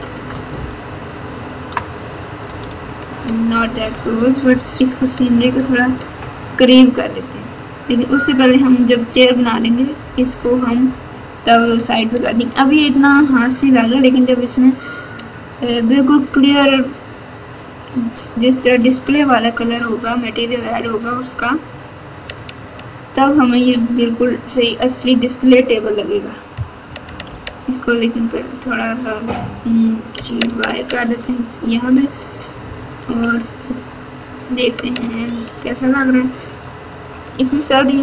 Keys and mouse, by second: 0.3 KP_Add, 0.5-1.6 KP_Add, 2.4 KP_Subtract, 2.6 KP_Subtract, 2.8 KP_Subtract, 3.3 KP_Subtract, 3.4 KP_Subtract, 4.4-5.2 ctrl+KP_4, 6.3-7.4 drag, 27.2 g, 28.1 y, 28.7 click, 30.1 g, 33.0 KP_1, 36.4 Tab.